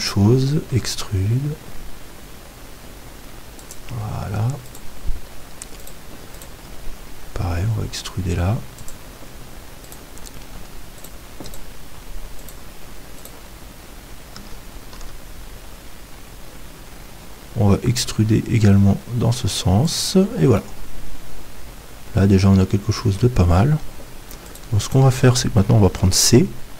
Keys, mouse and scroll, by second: 0.8 e, 3.7-5.5 drag, 4.7-15.1 right drag, 7.3 e, 15.0 e, 20.0-21.8 drag, 20.6-22.6 middle drag, 24.4-26.7 right drag, 25.9 c.